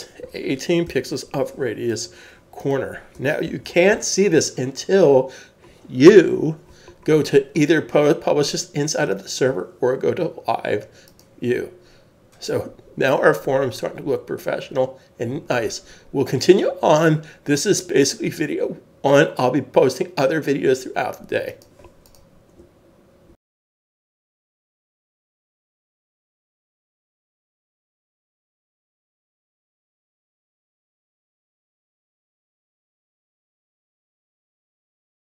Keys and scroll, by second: 0.2 1, 1.0 1, 1.0 8, 3.0 8, 3.5 super+s.